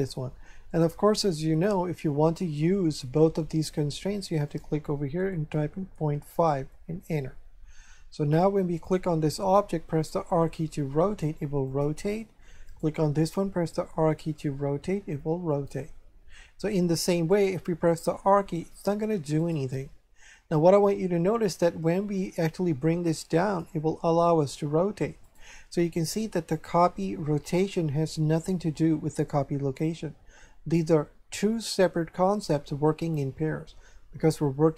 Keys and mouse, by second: 4.5 click, 5.6 KP_Decimal, 5.9 KP_5, 8.8 right click, 10.2 r, 11.7 click, 12.6 right click, 14.0 r, 15.5 click, 17.1 right click, 17.8 r, 19.4 right click, 21.8 click, 24.1 r, 25.2 right click.